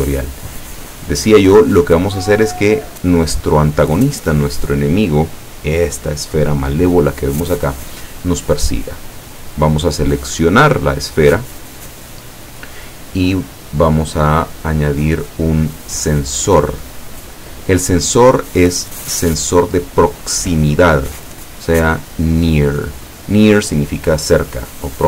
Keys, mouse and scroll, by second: 0.9 click, 9.4 right click, 12.0 click, 13.5-14.1 scroll up 1, 15.0 click, 16.1 click.